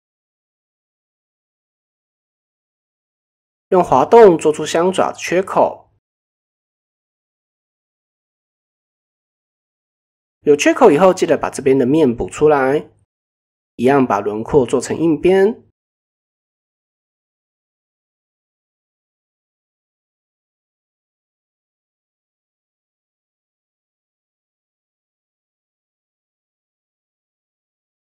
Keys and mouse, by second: 1.5-1.9 middle drag, 5.1 g, 5.7 g, 7.0 middle click, 8.1 click, 8.5-8.8 middle drag, 9.2 shift+click, 11.0 f, 13.6 click, 14.4 shift+click, 17.9 click, 19.0 click, 19.6 shift+click, 20.4 click, 21.9 middle click, 23.0 click, 23.5 middle click, 24.9 KP_1, 25.8 ctrl+KP_1, 27.1 ctrl+r.